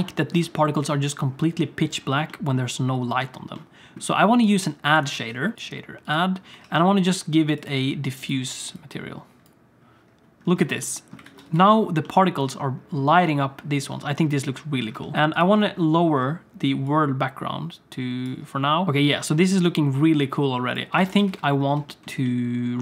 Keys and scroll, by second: 5.1 shift+a, 6.6 shift+a, 11.2 alt+a, 11.6 ctrl+s, 15.1 ctrl+s, 18.8 ctrl+s, 21.0 alt+a, 21.3 ctrl+s.